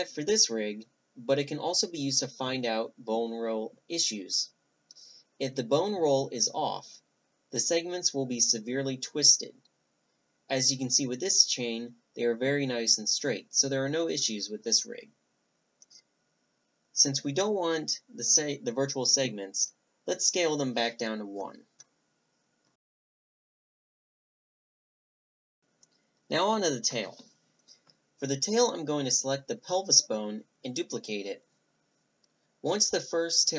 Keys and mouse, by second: 2.1-3.0 middle drag, 3.3 click, 4.2-6.6 drag, 6.2 Tab, 6.6-7.7 middle drag, 7.7 click, 7.8 middle drag, 8.1 middle click, 8.2-10.3 drag, 12.8-14.2 middle drag, 13.0-15.4 drag, 15.3-17.0 middle drag, 17.0-17.7 drag, 17.7-18.5 middle drag, 20.0-22.2 drag, 22.2 Tab, 22.3 right click, 23.0 Tab, 23.3 Tab, 24.0 Tab, 24.3-25.6 drag, 25.6 Tab, 25.6 middle click, 25.8 click, 25.9 middle click, 26.7 click, 26.9 middle click, 26.9 click, 27.0 middle click, 27.1 click, 27.6 shift+d, 28.7 r, 31.1 g, 32.3 r, 32.8 g, 33.4 right click.